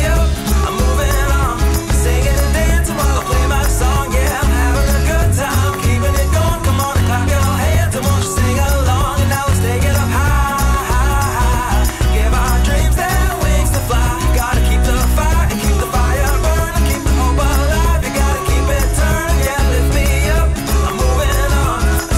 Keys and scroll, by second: 1.3 super+c, 1.9 shift+super+a, 7.8 shift+super+v, 8.8 shift+super+v, 9.8 shift+super+v, 13.6 alt+shift+super+v, 20.9 super+c, 21.5 alt+super+c.